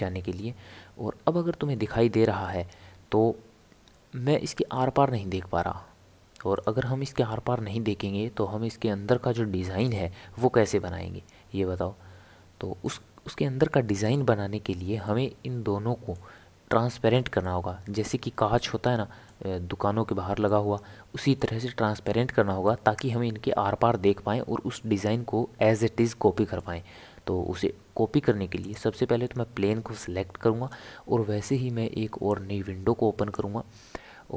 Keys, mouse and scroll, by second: 0.0-0.4 scroll up 4, 0.4-1.1 scroll down 1, 1.1-2.8 scroll up 1, 2.8 scroll up 1, 2.8 g, 7.9 s, 11.0 g, 15.0-25.7 middle drag, 28.6 click, 32.3-34.3 drag.